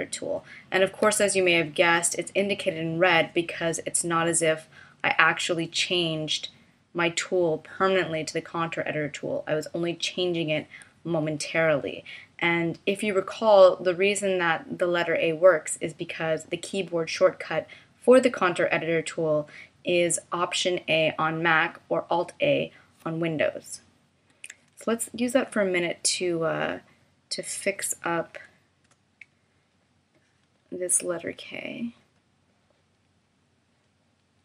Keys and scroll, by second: 24.5 a, 28.8 BackSpace.